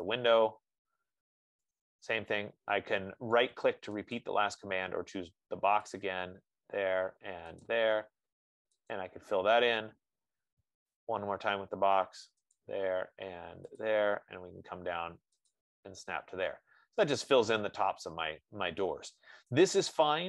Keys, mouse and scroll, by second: 2.1 right click, 2.4 F15, 4.5 click, 6.3 click, 16.6-17.4 scroll, 19.5-19.9 scroll, 19.9 right click.